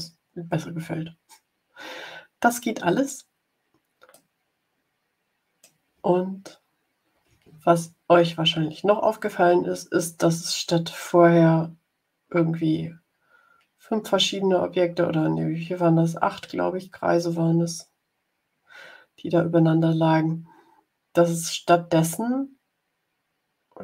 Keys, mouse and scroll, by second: 4.0-5.7 middle drag, 6.0-6.5 ctrl+scroll up 2, 9.4-11.1 drag.